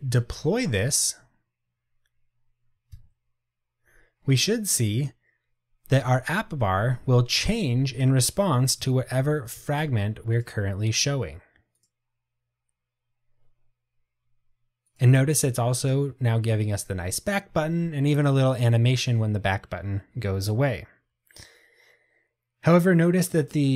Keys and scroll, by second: 1.0 ctrl+r.